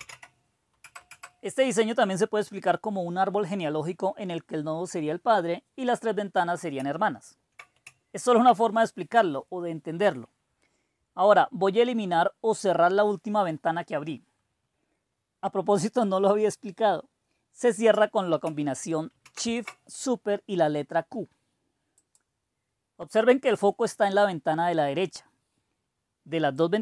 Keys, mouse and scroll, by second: 0.0-0.5 typing, 0.7 Return, 19.1 shift+super+q, 22.0-23.5 drag, 26.6-26.8 drag.